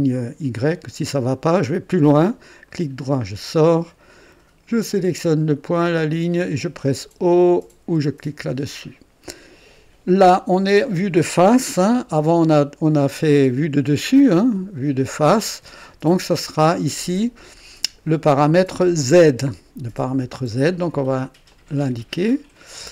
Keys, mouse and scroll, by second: 1.6 click, 2.6 right click, 4.6 click, 5.8 click, 7.8 o, 12.4-15.7 ctrl+alt+drag, 16.3 ctrl+alt+click, 21.4 click, 22.8 click.